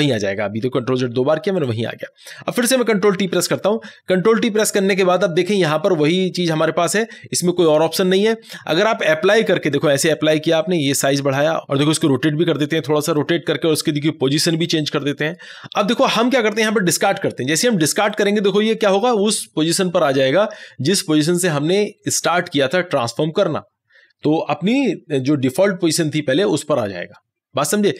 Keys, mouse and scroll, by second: 1.6 click, 3.3 ctrl+t, 9.7-11.6 drag, 11.9 ctrl+z, 11.9-17.5 drag, 18.1 click.